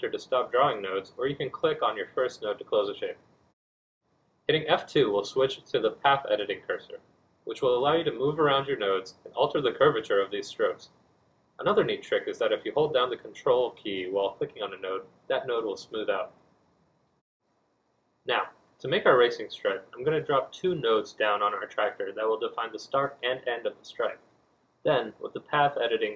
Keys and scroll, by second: 12.2 F1, 13.0 F2, 16.3 F2, 16.4 F1, 21.4 b, 24.7 F2.